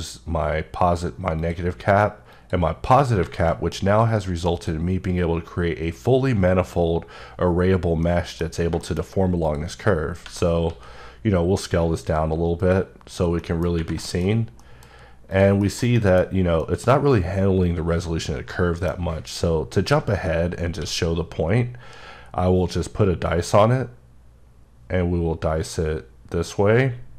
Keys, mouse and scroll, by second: 1.4 click, 2.3 click, 3.5 middle click, 4.6 click, 8.1 middle click, 8.5 scroll down 1, 8.8 shift+middle click, 9.5 click, 10.7 s, 12.6 click, 13.1-13.4 scroll up 3, 13.4 middle click, 14.1 middle click, 14.3 scroll up 1, 14.6 middle click, 14.8 scroll down 3, 15.3 click, 15.6 KP_Decimal, 16.0 middle click, 16.3 scroll up 2, 16.6 middle click, 18.5 middle click, 20.8 q, 22.7 click, 25.3-26.9 scroll up 8, 26.9-27.1 scroll up 1.